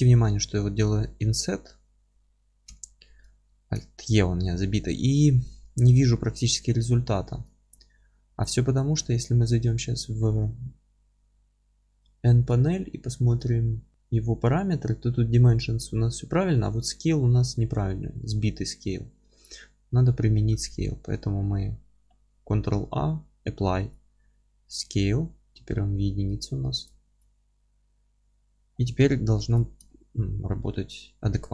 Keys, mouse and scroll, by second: 0.4 s, 3.6 alt+e, 6.3 Escape, 6.5-6.9 scroll up 1, 7.2-7.6 scroll down 1, 7.6 ctrl+z, 8.6-9.0 scroll down 1, 13.9 Tab, 19.5-29.5 middle drag, 28.5-28.8 scroll down 2, 28.8 scroll up 2, 29.0 Tab, 29.5 click, 29.9-31.5 alt+middle drag, 30.4 alt+e.